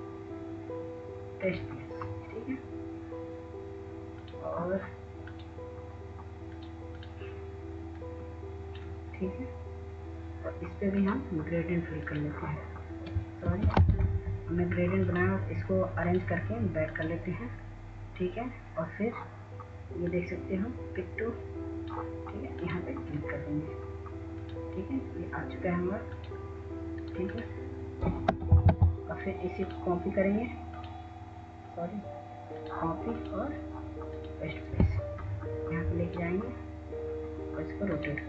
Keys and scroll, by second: 15.0 ctrl+z, 29.9 w, 30.4 w.